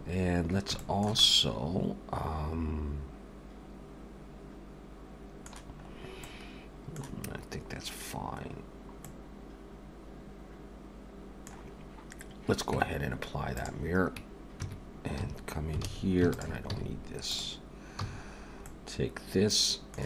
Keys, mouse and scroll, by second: 0.5-0.8 scroll down 2, 0.8 shift+middle click, 1.2 middle click, 5.9-6.6 scroll up 2, 6.3 middle click, 8.6 scroll down 1, 9.0 middle click, 12.7 Tab, 13.6 click, 14.6 Tab, 15.2 a, 15.8 alt+a, 16.3 alt+shift+click, 16.7 x, 18.0 a, 18.3-18.7 scroll down 2, 18.7 middle click.